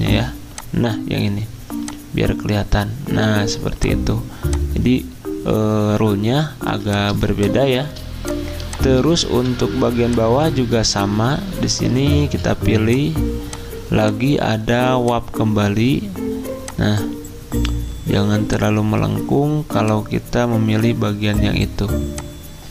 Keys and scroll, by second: 6.7 z, 9.3 v, 13.9 typing.